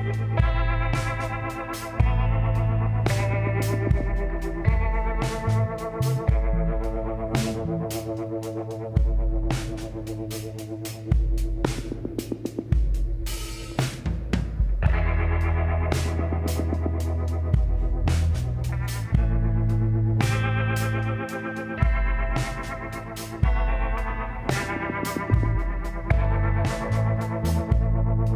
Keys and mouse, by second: 0.2 s, 3.0-4.8 drag, 5.5-7.3 drag, 8.5-10.5 middle drag, 10.9 middle click, 11.7-13.7 drag, 14.1-19.0 middle drag, 24.4-25.6 right drag, 25.6 shift+a.